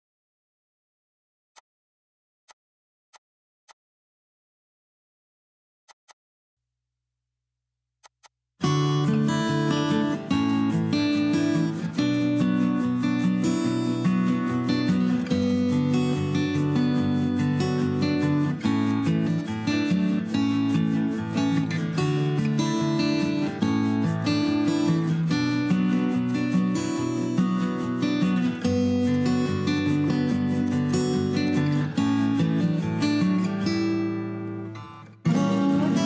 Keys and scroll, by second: 17.5 b, 31.2 Escape.